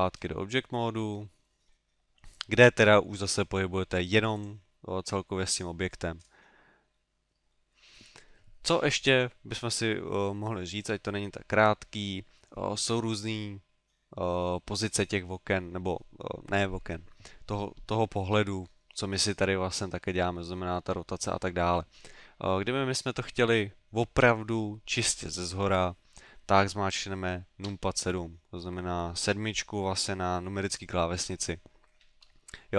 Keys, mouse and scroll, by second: 0.4 scroll down 3, 1.7 middle click, 3.2 g, 4.4 click, 6.2 scroll up 3, 7.0 middle click, 7.5 middle click, 13.9 middle click, 14.6 middle click, 18.4 middle click, 19.0 middle click, 27.7 KP_7.